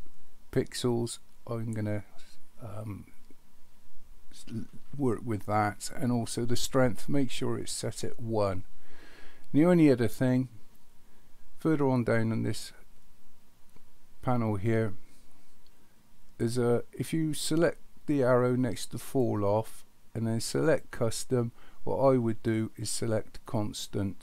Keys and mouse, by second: 19.0 click, 20.6-23.7 drag.